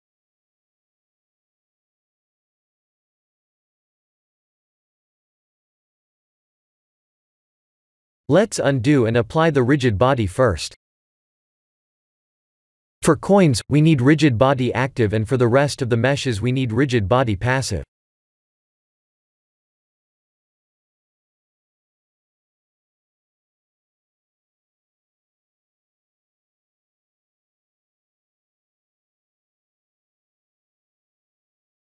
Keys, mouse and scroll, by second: 0.2 p, 5.9 ctrl+z, 8.4 click, 9.8 click, 12.9 click, 13.4 click, 14.6 Tab, 14.9 click, 18.0 click, 20.4 click, 24.0 click, 26.1 click, 27.4 click, 28.9 click, 30.9 click.